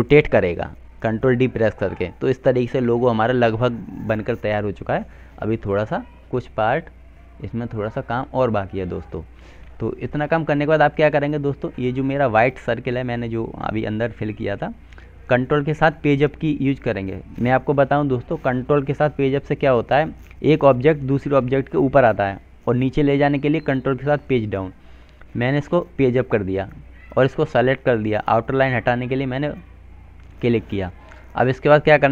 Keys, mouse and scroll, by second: 2.4 F3, 3.0 click, 7.0 F2, 7.4 click, 11.1 click, 16.5 ctrl+Page_Up, 17.1 ctrl+Page_Up, 20.8 ctrl+Page_Up, 24.1 click, 26.7 right click.